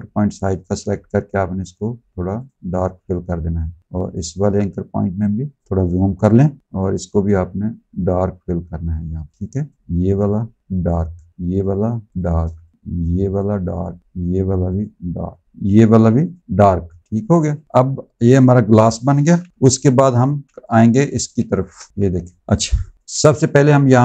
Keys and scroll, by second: 9.3 space, 12.4 space, 17.0 z, 19.5 v, 20.1 z, 21.2 space, 21.9 ctrl+z, 22.4 space.